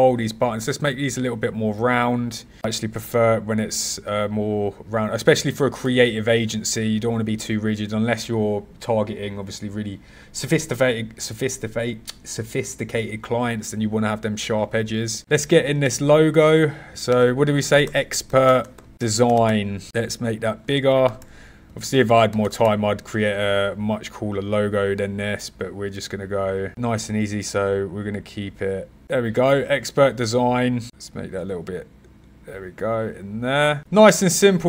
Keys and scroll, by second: 15.2 super+c, 15.8 alt+shift+super+v, 17.8-21.0 typing, 21.1 Return, 22.0 1, 22.2 BackSpace, 22.4 0, 22.5 Return, 26.7 BackSpace.